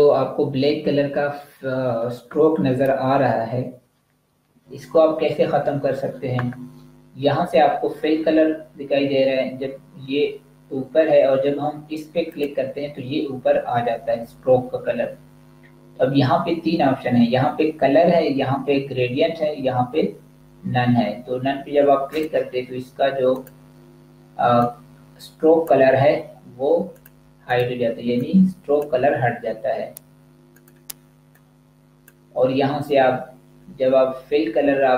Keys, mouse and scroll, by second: 12.2 click, 21.9 click.